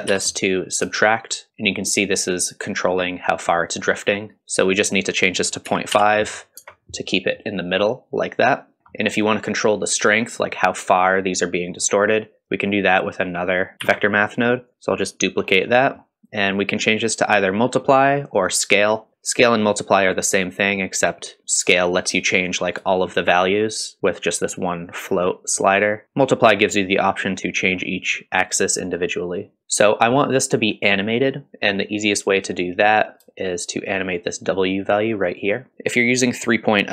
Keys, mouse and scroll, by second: 0.9-4.4 shift+drag, 4.7-8.8 drag, 8.8-9.1 scroll down 1, 11.7-12.0 scroll up 1, 12.5-13.3 drag, 13.8 shift+d, 14.7 click, 15.5 scroll up 2, 15.8-16.4 middle drag, 16.4-19.1 drag, 21.4-26.0 shift+drag, 28.8-29.6 drag, 29.6-30.0 middle drag, 29.6-30.0 scroll down 1, 33.4-35.7 shift+drag, 35.7 middle click, 35.7-36.3 scroll down 3.